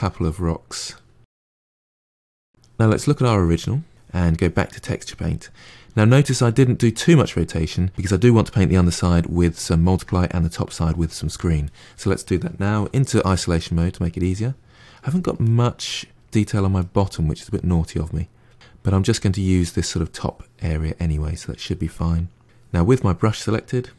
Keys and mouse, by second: 3.4-5.2 drag, 5.2-7.9 middle drag, 8.9-12.7 middle drag, 12.7 KP_Divide, 13.1-18.9 middle drag, 20.7-22.4 middle drag, 22.8-23.9 drag.